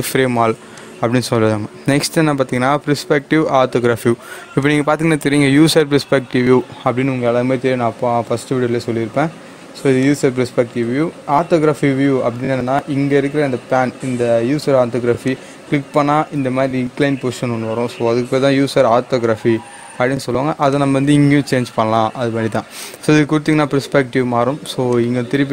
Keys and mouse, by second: 0.7 click, 4.6 click, 9.9 click, 15.2 click, 15.3 click, 20.7 click.